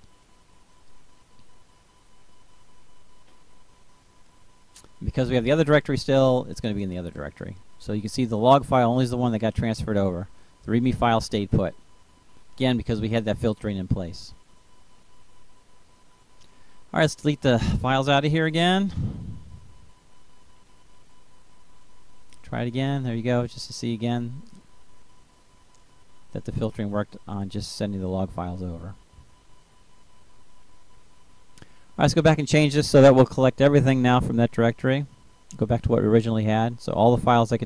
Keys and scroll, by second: 11.7 Delete, 15.1 Delete, 18.1 ctrl+v.